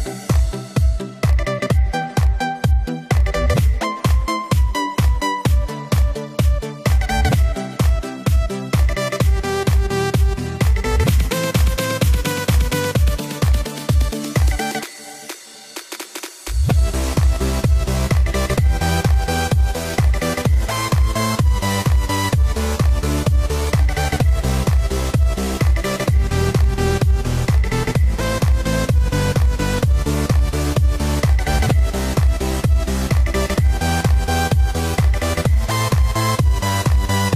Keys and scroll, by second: 14.8 Return, 17.0 b, 19.8 super+t.